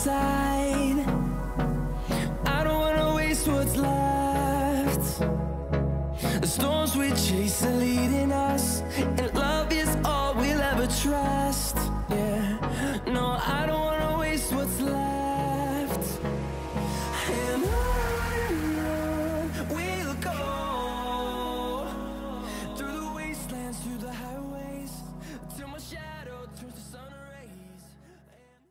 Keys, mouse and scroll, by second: 8.2-8.8 scroll down 1, 10.6-11.1 scroll up 1, 11.6 scroll up 1, 12.2 typing, 17.9 scroll up 1, 17.9 typing.